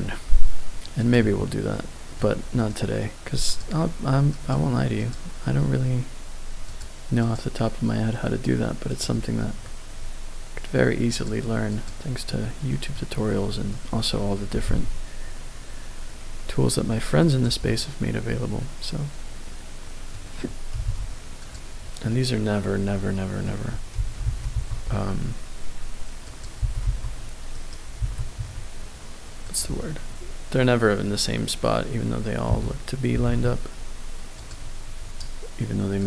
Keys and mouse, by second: 1.0 click, 1.2 Tab, 1.7-2.2 middle drag, 2.5 right click, 4.3 click, 6.6 click, 8.9 click, 11.1 click, 11.7 click, 12.3 middle click, 13.8 middle click, 14.5 g, 14.6 z, 17.2 click, 17.7-20.1 middle drag, 20.7 r, 21.4 click, 22.1-23.5 middle drag, 24.0 shift+d, 24.2 g, 24.5 y, 26.3 click, 26.6 g, 26.8 y, 27.5 right click, 28.0 g, 28.3 x, 29.4 click, 29.8-32.5 middle drag, 32.5 g, 33.1 r, 33.2 z, 34.4 click.